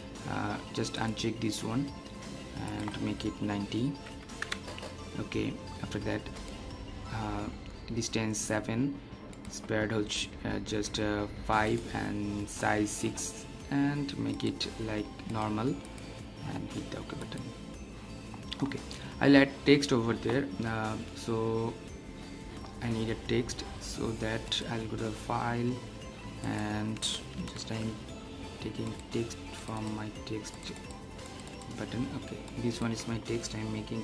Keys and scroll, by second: 27.6 super+e.